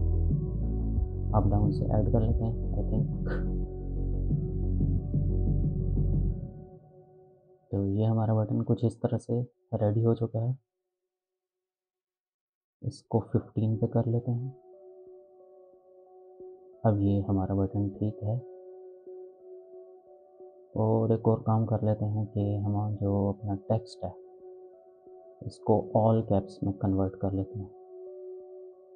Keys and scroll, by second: 9.8 ctrl+z, 13.5 1, 14.0 5, 14.5 Return.